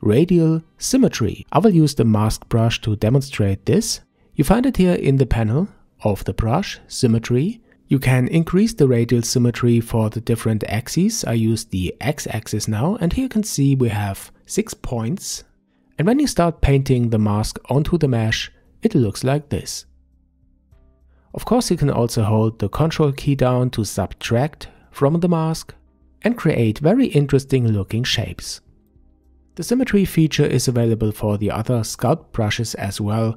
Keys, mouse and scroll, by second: 1.5 KP_5, 3.3 click, 9.4-12.0 drag, 13.4-14.5 scroll up 1, 14.5-15.3 scroll up 2, 15.3-18.3 drag, 25.5-28.5 ctrl+drag, 28.9-32.9 drag, 32.9-33.3 scroll down 6.